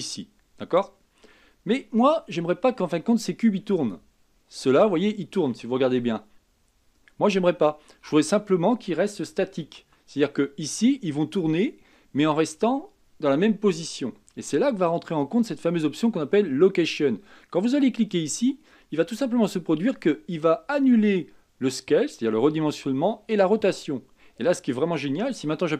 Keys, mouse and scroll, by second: 6.1 r, 9.8 ctrl+z, 17.9 click.